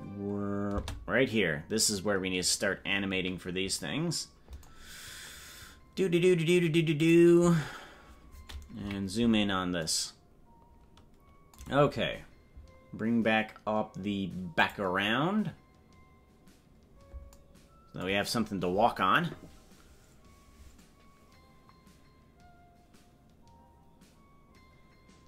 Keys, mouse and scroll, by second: 1.0 space, 5.2 scroll up 1, 6.9 click, 6.9 scroll up 9, 8.7 KP_Decimal, 16.3 click.